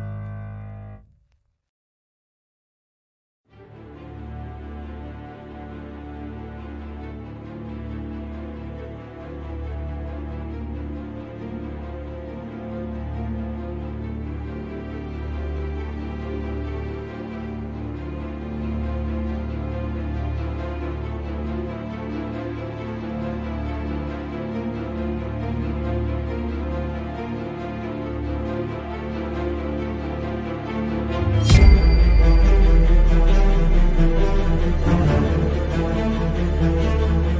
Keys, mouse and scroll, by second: 10.7 click, 12.9-16.5 drag, 18.8 click, 20.2-23.2 drag, 24.3-27.9 drag, 29.1 click, 31.0 click.